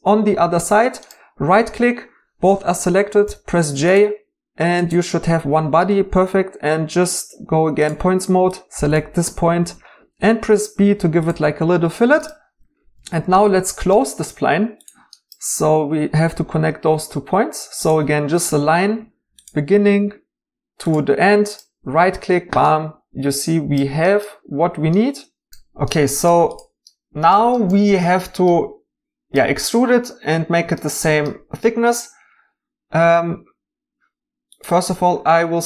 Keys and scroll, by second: 3.2 j, 9.6 b.